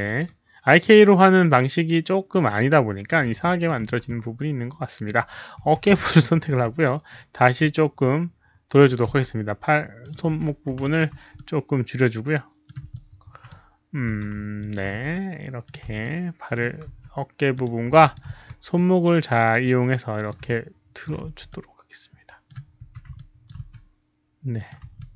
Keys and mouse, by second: 0.0-0.6 typing, 0.1 alt+click, 0.8-3.0 alt+drag, 3.4 alt+drag, 5.0 alt+click, 5.6 e, 6.0-6.5 alt+drag, 7.5-8.8 alt+drag, 8.8-10.3 typing, 10.0 click, 10.8 alt+click, 11.3-12.6 middle drag, 12.6-18.3 typing, 12.9-13.4 alt+drag, 14.5 alt+click, 15.5 middle click, 15.5 alt+click, 15.6 alt+click, 16.0-16.5 middle drag, 16.9 alt+click, 17.5 alt+click, 17.9 alt+click, 18.7-19.2 drag, 19.6-20.2 alt+drag, 20.0-21.3 typing, 20.2 middle click, 20.4-21.0 alt+drag, 21.4-22.4 middle drag, 22.6-24.1 typing, 23.1-23.4 alt+drag, 23.1 middle click, 23.6 middle click, 24.5 alt+click, 24.9 alt+click.